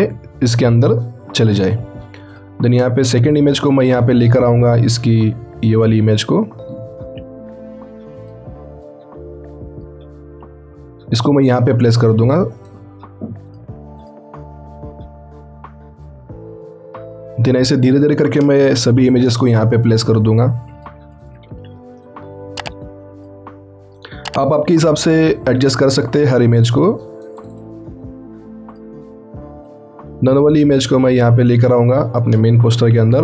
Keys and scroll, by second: 18.8 ctrl+t, 24.7 ctrl+t, 32.8 ctrl+t.